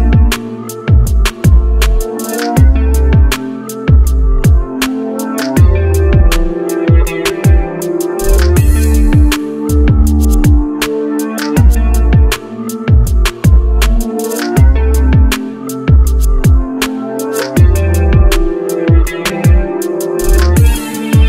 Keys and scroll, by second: 12.7 shift+space, 14.5 ctrl+c, 16.3 ctrl+v.